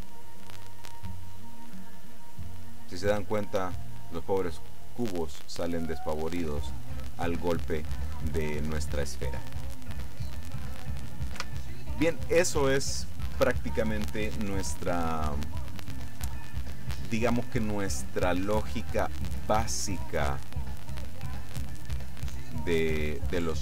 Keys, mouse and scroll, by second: 11.4 Escape, 18.5-19.8 middle drag, 20.5 middle click, 21.1 middle click, 21.9 middle click.